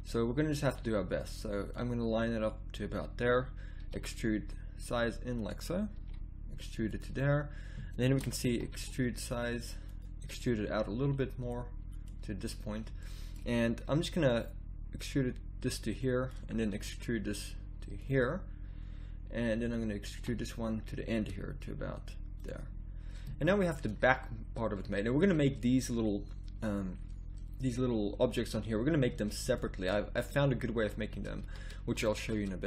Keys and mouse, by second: 1.7-3.8 drag, 3.8 e, 6.0 e, 8.4 e, 10.2 e, 15.0-16.8 drag, 16.8 e, 20.1 e, 22.7-25.1 middle drag, 30.8 middle click, 31.4 a.